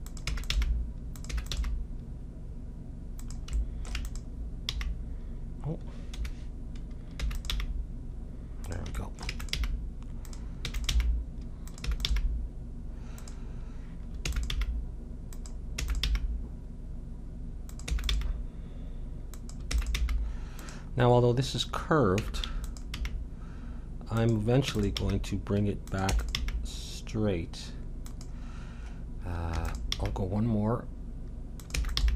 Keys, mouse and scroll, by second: 0.2 e, 0.5 g, 1.3 e, 1.6 g, 3.6 middle click, 4.0-6.2 drag, 4.7 g, 7.2 e, 7.5 g, 9.3 e, 9.6 g, 10.4 middle click, 10.6 e, 10.9 g, 11.8 e, 12.1 g, 14.3 e, 14.5 g, 15.8 e, 16.1 g, 17.9 e, 18.1 g, 19.7 e, 20.0 g, 21.1 middle click, 22.2 e, 23.0 g, 24.6 e, 25.0 g, 26.1 e, 26.4 g, 28.6-30.7 middle drag, 29.5 e, 30.0 g, 31.8 e, 32.0 g.